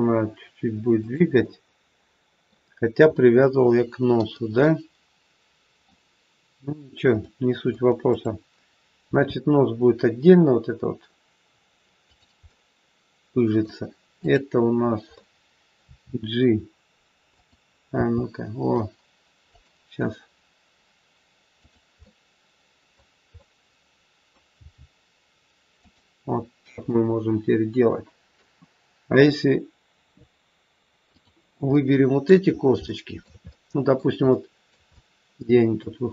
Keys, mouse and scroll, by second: 1.4 middle click, 3.0 middle click, 8.0 middle click, 8.0 click, 8.9 r, 12.4 middle click, 14.1 click, 15.1 middle click, 15.8 r, 17.9 g, 21.5 click, 21.9 middle click, 23.4 middle click, 23.4 scroll up 1, 24.5 g, 26.1-26.8 scroll down 3, 26.8 middle click, 31.0 click, 31.8 middle click, 32.4 scroll up 2, 32.8 shift+middle click, 33.4 middle click, 34.3 middle click, 34.4 shift+middle click, 34.8 scroll up 1, 34.9 middle click.